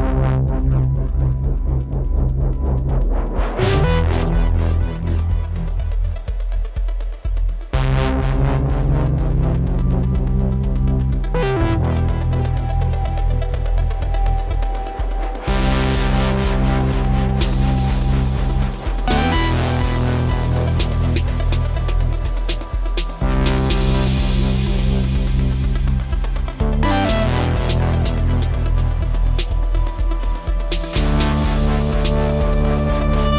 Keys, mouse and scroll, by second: 3.0 alt+click.